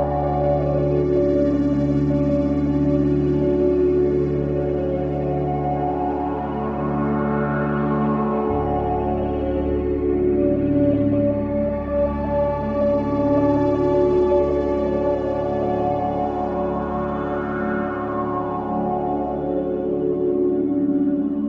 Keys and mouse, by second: 1.0 click, 2.3 click, 4.3 click, 4.6 click, 5.3-6.4 typing, 7.2 click, 7.6 click, 8.3-9.1 drag, 10.4 click, 13.5 click, 14.1-15.9 drag, 16.4-17.5 drag, 18.6 click.